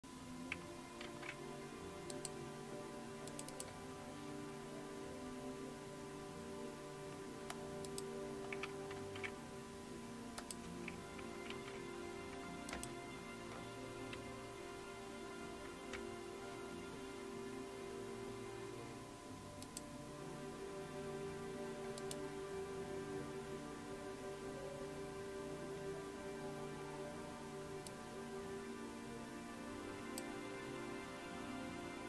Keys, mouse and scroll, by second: 1.0 super+w, 2.1 click, 3.3 click, 7.9 click, 10.4 click, 12.7 super+Return, 12.7 click, 19.6 click, 22.0 click, 27.9 click.